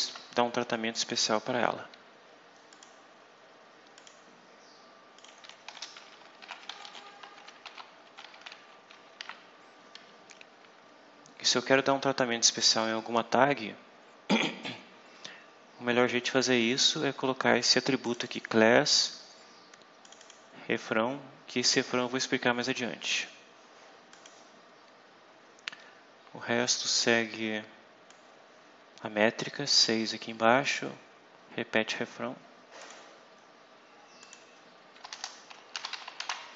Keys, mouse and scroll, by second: 2.6 click, 3.9 click, 5.1 click, 5.6-9.6 typing, 18.0 click, 20.0 click, 24.0 click, 25.3 scroll down 2, 28.0-30.0 drag, 32.7 click, 33.3-33.7 scroll down 2, 34.1 click, 35.0 Return, 35.8 shift+p, 36.1 shift+..